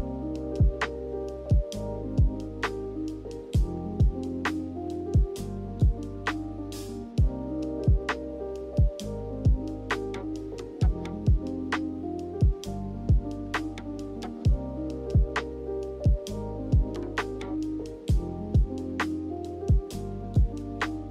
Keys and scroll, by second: 3.7 ctrl+c, 3.9 ctrl+v, 7.5 m, 11.7 a, 14.7 ctrl+h.